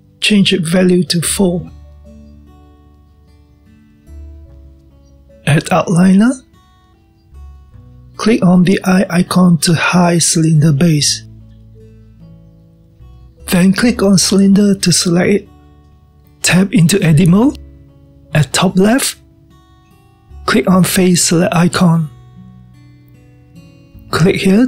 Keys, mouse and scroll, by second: 0.6-3.7 drag, 11.5 click, 15.5 click, 17.4 click, 19.7 Tab, 22.7 click, 23.4-24.6 scroll up 2.